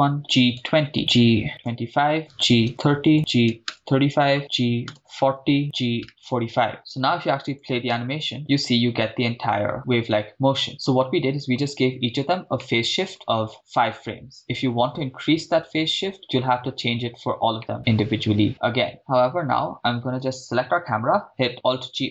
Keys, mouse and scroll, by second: 0.2 g, 0.2 2, 0.4 0, 0.9 Return, 1.5-6.1 typing, 2.2 right click, 3.1 Return, 3.5 right click, 3.8 Return, 4.4 right click, 5.4 Return, 5.6 right click, 6.7 Return, 7.1 click, 7.9 shift+space, 10.7-11.6 middle drag, 12.0-12.4 scroll up 2, 12.6-13.1 shift+middle drag, 13.2 scroll up 2, 16.2 middle click, 17.6-18.9 middle drag.